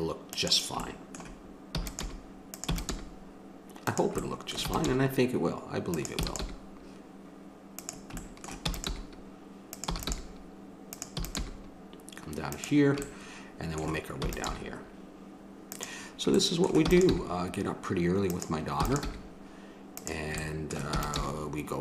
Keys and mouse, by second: 1.7 e, 2.0 g, 2.7 e, 4.6 e, 4.9 g, 6.2 e, 6.4 g, 8.4 click, 8.7 e, 8.9 g, 9.9 e, 10.1 g, 11.1 e, 11.4 g, 13.0-14.9 drag, 14.2 e, 14.5 g, 16.4-18.3 drag, 16.8 e, 17.1 g, 18.8 e, 19.0 g, 20.4 click, 21.2 g.